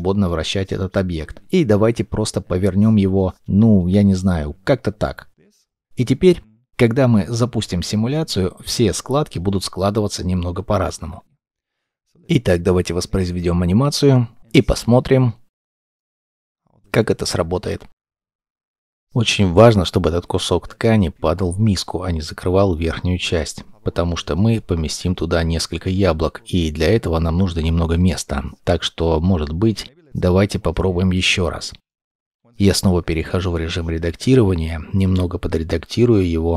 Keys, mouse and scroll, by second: 5.4 g, 5.7 middle click, 13.7-14.1 scroll up 1, 14.1 middle click, 19.2 middle click, 27.0 middle click, 31.1 scroll down 1, 31.8 shift+middle click, 32.9 g, 34.5 g, 35.9 g, 36.0 scroll down 1, 36.2 double click, 36.3 g.